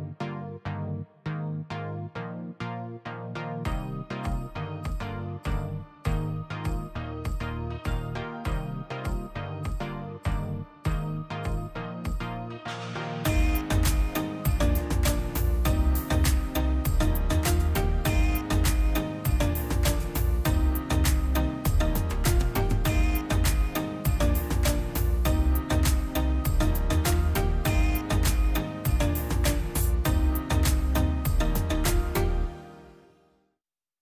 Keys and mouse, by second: 0.1-0.9 drag, 2.6 middle click, 2.8-4.1 middle drag, 4.1 click, 4.4-4.7 middle drag, 4.7 click, 5.3 middle click, 6.1 click, 6.4 shift+a, 8.9 click, 10.1 drag, 10.4 click, 11.3 click, 12.7 middle click, 13.3 n, 14.0-15.6 drag, 15.9 middle drag, 16.4 click, 17.4 click, 18.1 click, 18.8 click, 19.7 middle drag, 20.1 middle click, 20.5 click, 21.7 shift+d, 22.5 click, 22.7 middle click, 23.2 click, 23.9 middle click, 24.1 click, 24.6 click, 25.4 ctrl+shift+drag, 26.0-27.0 middle drag, 27.0 click, 27.6-29.1 drag, 29.9 click, 30.4 shift+a, 33.4-34.0 drag.